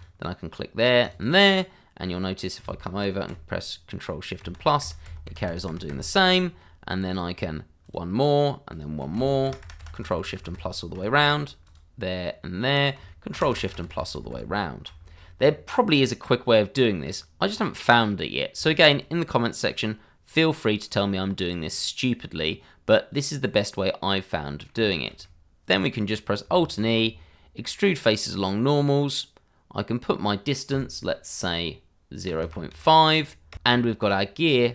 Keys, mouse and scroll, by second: 1.0 click, 1.5 middle click, 3.2 ctrl+shift+KP_Add, 4.4 ctrl+shift+], 6.6 middle click, 7.8 click, 8.7 click, 9.4 ctrl+shift+KP_Add, 11.6 shift+click, 11.7 click, 12.7 click, 13.3 ctrl+shift+KP_Add, 15.1-15.5 scroll down 1, 15.5 middle click, 17.5-17.8 scroll up 1, 17.8 middle click, 18.7 shift+middle click, 21.1 middle click, 26.5 alt+e, 28.0 click, 32.3 KP_0, 32.7 KP_5, 33.5 KP_Enter, 33.6-34.5 scroll down 1, 34.5 click.